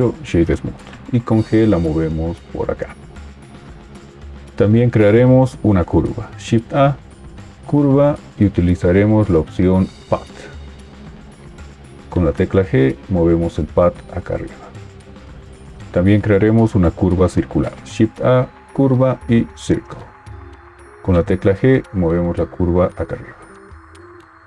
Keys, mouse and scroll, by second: 2.0 g, 6.3 shift+a, 12.1 g, 17.8 shift+a, 21.3 g.